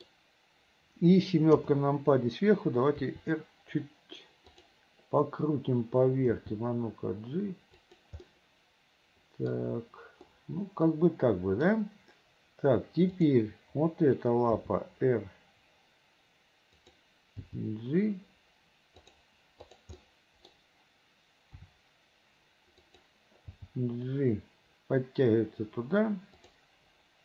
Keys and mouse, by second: 0.0 middle click, 1.7 KP_7, 3.1 r, 6.5 g, 8.4-9.6 middle drag, 10.5-11.8 drag, 14.7 r, 17.6 g, 19.8 click, 20.1 click, 21.7 r, 23.6 g.